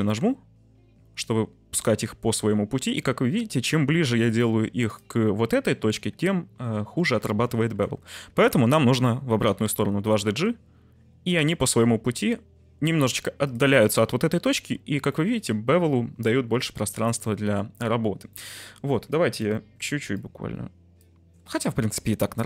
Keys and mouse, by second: 2.7 g, 4.8 right click, 7.2 ctrl+z, 9.4 g, 9.6 g, 13.4 middle click, 14.4 Tab, 15.0 middle click, 17.0-17.5 middle drag, 17.3 t, 18.4-18.9 middle drag, 20.1-21.4 shift+drag, 21.4 right click.